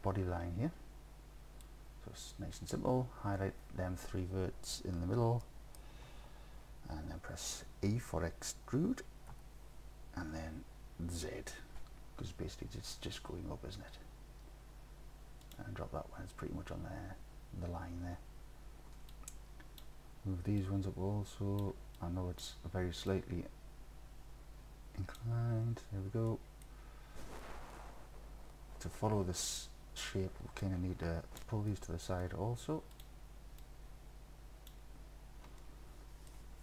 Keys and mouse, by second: 1.7-2.7 drag, 5.4 click, 5.5 click, 9.3 e, 11.3 z, 15.5 click, 19.2-19.8 drag, 20.7 click, 22.1-22.5 drag, 23.2-25.2 drag, 26.3 click, 30.7-31.4 drag, 31.8 click, 33.7-34.7 drag, 35.6 click, 36.0 click.